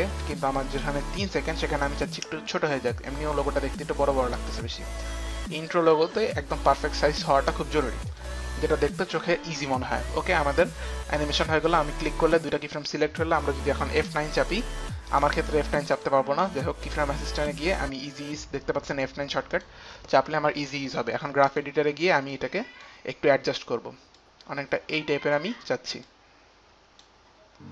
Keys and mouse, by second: 0.4 click, 2.6 click, 6.0 click, 11.7 click, 15.2 right click, 15.2 click, 16.1 click, 16.1 right click, 19.6 click, 21.6 click, 22.5 click, 22.6 click, 24.3 click, 26.1 click.